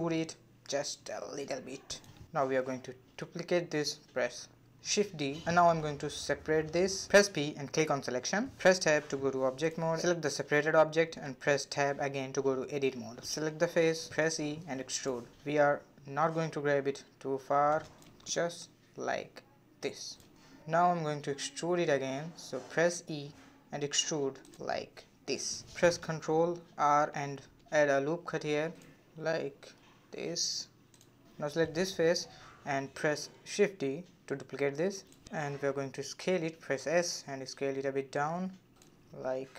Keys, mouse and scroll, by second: 1.7-2.0 scroll up 1, 2.0-3.4 middle drag, 3.4 shift+d, 6.3 p, 8.2 Tab, 8.8 click, 9.8 Tab, 10.7 click, 11.5 3, 11.6 click, 13.1 click, 14.2 e, 17.7-20.0 middle drag, 20.0-20.4 scroll up 2, 20.4-23.0 shift+middle drag, 23.0-23.9 scroll down 1, 23.9 e, 25.4-26.6 middle drag, 26.6 ctrl+r, 30.7 middle click, 31.3 click, 31.7 middle click, 32.5 3, 33.1 click, 34.1 shift+d, 36.2 s, 37.6 middle click, 38.0 scroll down 1, 38.3 s.